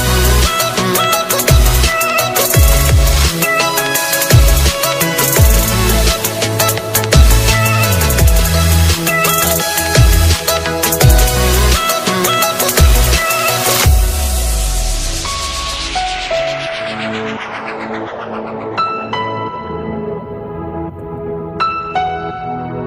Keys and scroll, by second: 1.0 ctrl+v, 12.9 ctrl+space, 22.6 alt+space.